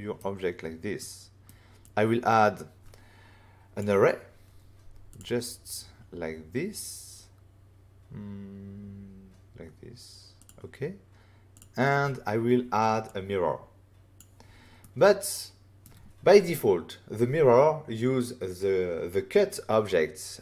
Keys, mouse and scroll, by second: 0.9 middle click, 1.8 click, 5.1 click, 10.3 click, 11.5 click, 13.0 click, 14.7 middle click.